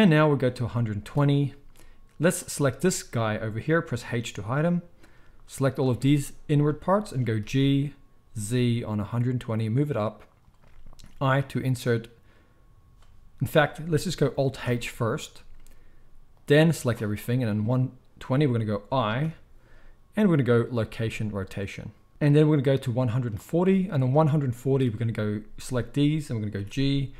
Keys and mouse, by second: 2.3-5.1 shift+middle drag, 4.1 h, 5.1-10.3 drag, 7.4 g, 10.3-16.3 middle drag, 14.6 alt+h, 16.3-27.1 drag, 19.2 i, 26.5 g.